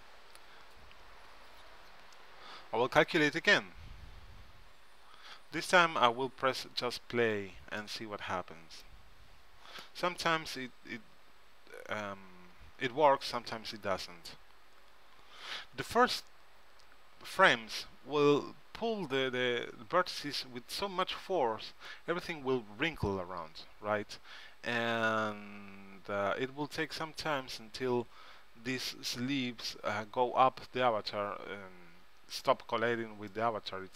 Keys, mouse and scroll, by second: 3.2-5.2 drag, 9.7-10.7 middle drag, 12.9-15.1 middle drag, 16.2-17.4 middle drag.